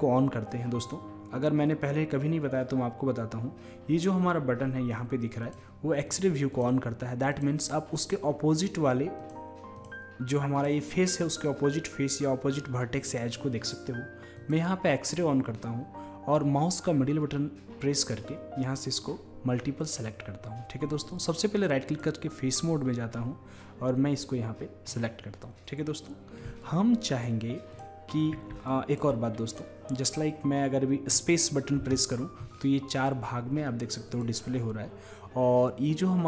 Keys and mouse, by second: 5.5-9.1 drag, 9.2-12.4 drag, 13.1-16.3 drag, 26.6-30.6 drag, 31.8-34.1 right drag, 31.8 space, 34.1-36.2 drag.